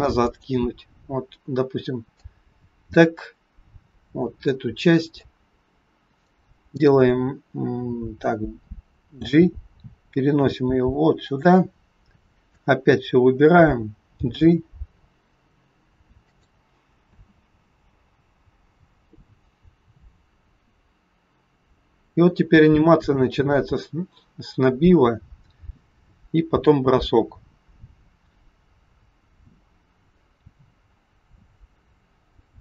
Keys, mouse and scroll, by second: 0.2 click, 2.2 click, 5.2 click, 9.1 g, 11.7-12.2 scroll down 4, 12.4 click, 14.2 g, 16.7 click, 16.9 space.